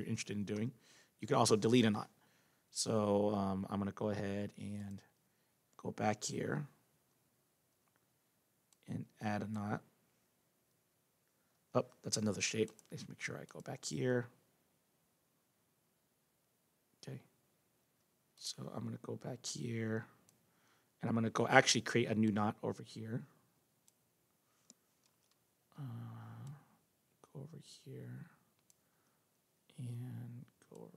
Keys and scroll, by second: 11.5 ctrl+z, 25.0 ctrl+z.